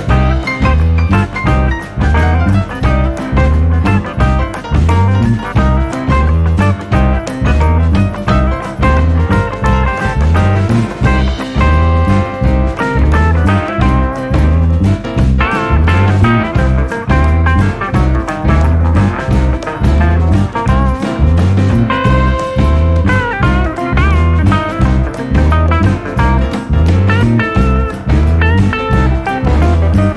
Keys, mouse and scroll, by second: 7.1 click, 9.8-11.4 middle drag, 11.4 KP_7, 12.8-15.0 scroll up 12, 15.0-16.2 scroll up 1, 16.2 scroll up 1, 16.3 click, 18.6-19.4 scroll down 5, 19.4-23.4 middle drag, 23.4-23.9 scroll up 1, 23.9-25.6 middle drag, 25.6-26.3 scroll up 1, 26.3-29.0 middle drag, 29.0 click.